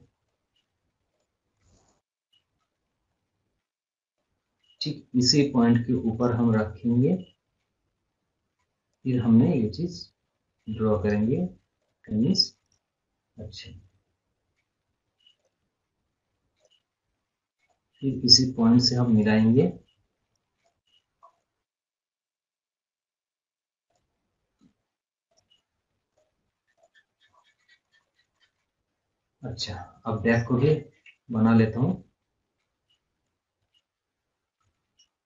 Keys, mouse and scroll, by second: 0.2 click, 1.7 scroll down 1, 4.7 click, 7.1 scroll up 1, 7.4 scroll down 1, 8.8 click, 10.9 right click, 11.7 click, 12.0 scroll, 12.3 scroll down 1, 12.7 scroll up 1, 13.3 scroll down 1, 15.3 click, 17.3 scroll down 1, 19.1 click, 20.8 click, 21.1 scroll up 1, 21.3 scroll down 1, 22.1 scroll up 1, 22.4 scroll, 23.7 scroll down 1, 23.8 click, 26.1 right click, 26.1 right click, 26.7 click, 27.2 scroll up 1, 27.4 scroll, 27.5 scroll down 1, 27.8 scroll, 28.2 scroll up 1, 28.5 scroll down 1, 29.1 scroll up 1, 29.6 scroll, 29.7-30.1 scroll down 2, 30.9 d, 31.3 scroll up 1, 31.5 scroll down 1, 33.1 click, 34.5 scroll up 1.